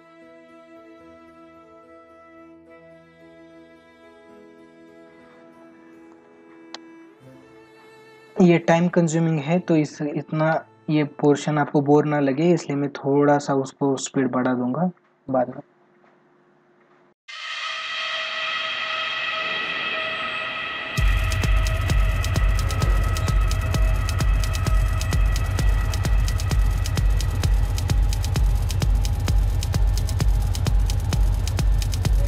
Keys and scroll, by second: 0.9 space, 3.9 ctrl+-, 4.9 ctrl+-, 6.1 space, 10.4 ctrl+alt+z, 11.3 space, 13.2 ctrl+-, 14.0 space, 20.7 space, 21.6 ctrl+alt+z, 24.6 ctrl+=, 25.1 ctrl+=, 25.5 ctrl+alt+z, 28.5 ctrl+alt+z, 30.2 ctrl+alt+z, 31.9 ctrl+alt+z.